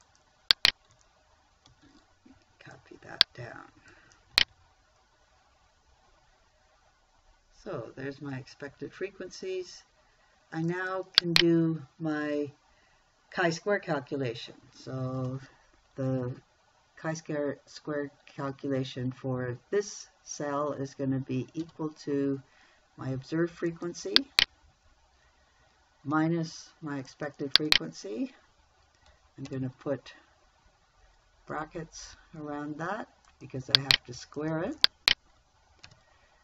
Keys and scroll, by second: 2.2 ctrl+c, 4.8 ctrl+v, 22.1 =, 26.6 -, 29.9 shift+0, 36.3 shift+9.